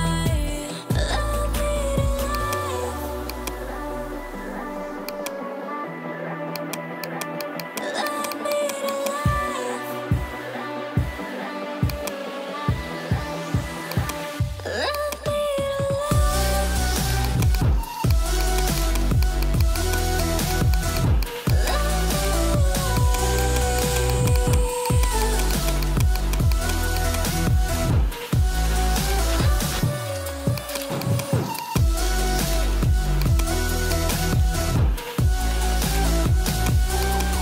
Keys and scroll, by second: 5.8 [, 6.7 ], 10.5 ], 16.7 ], 18.4 [, 19.0 ], 21.6 [.